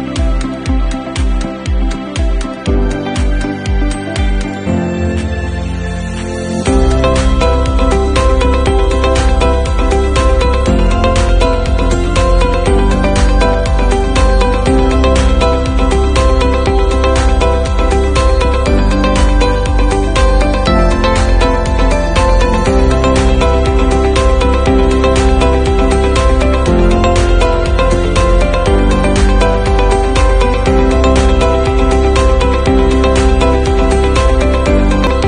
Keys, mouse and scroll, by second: 5.6 ctrl+z, 19.8 click.